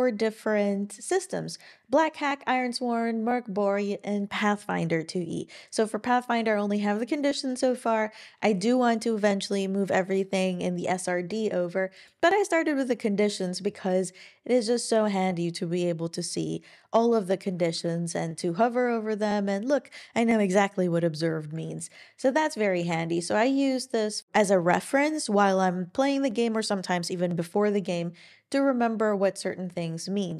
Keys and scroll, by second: 22.8 super+w.